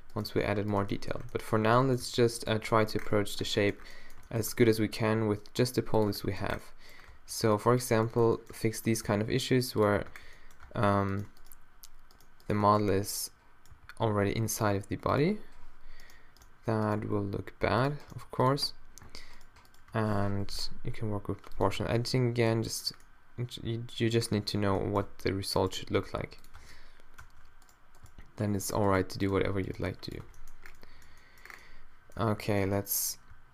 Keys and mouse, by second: 1.7 z, 2.0 g, 2.6 z, 3.5 Tab, 4.5 Tab, 5.1 g, 6.1 Tab, 7.1 Tab, 7.6 middle click, 8.9 middle click, 9.1 g, 9.9 click, 10.1 Tab, 10.7 Tab, 11.1-12.2 middle drag, 12.8 middle click, 13.7 g, 17.0 g, 18.1 g, 20.3 o, 20.8 g, 21.8 Tab, 25.1 Tab, 25.8 g, 26.6 Tab, 27.2 Tab, 28.0 g, 28.9 g, 29.7 g, 30.2 Tab, 32.2 Tab.